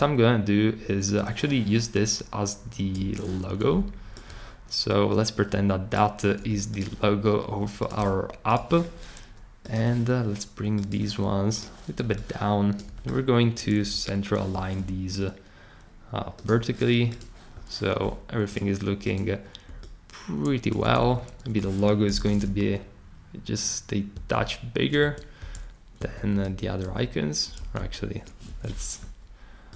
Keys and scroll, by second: 14.5 super+g, 20.9 super+z, 22.1 super+k, 24.1 shift+Up, 25.0 Return, 25.4 Right, 26.0 Right, 26.4 super+z, 26.8 super+z, 27.7 shift+super+z.